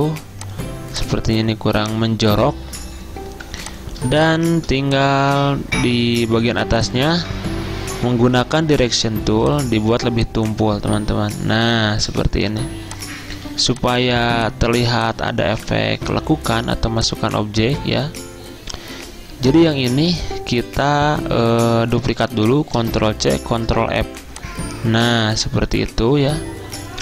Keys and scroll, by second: 0.1 a, 3.4 v, 6.0 a, 13.6 z, 15.6 v, 22.8 ctrl+c, 23.6 ctrl+f.